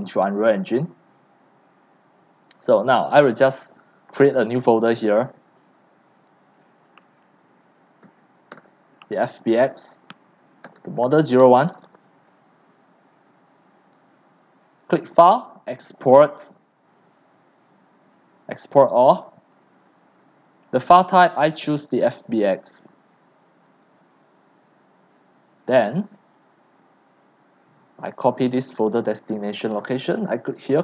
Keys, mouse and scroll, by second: 0.4-1.4 drag, 2.3 click, 4.9 click, 5.7 click, 8.0 f, 8.5 BackSpace, 10.4-13.4 typing, 13.6-22.3 drag, 22.3-23.1 scroll down 5, 23.1-23.8 scroll down 1, 23.8-28.9 drag, 28.9 ctrl+c, 29.7-30.8 drag.